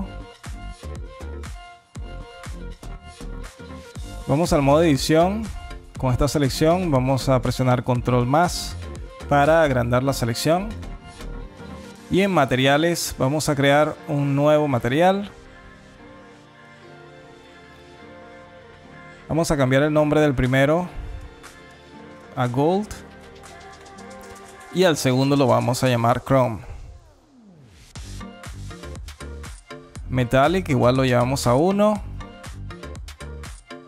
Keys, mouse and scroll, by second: 3.2 alt+click, 4.0 Tab, 4.4 alt+middle click, 4.9 scroll up 3, 5.5 alt+click, 6.4 alt+middle click, 7.5 ctrl+KP_Add, 12.0 click, 13.6 click, 16.2 click, 19.2 click, 19.3 click, 23.3 click, 23.5 click, 30.7 click.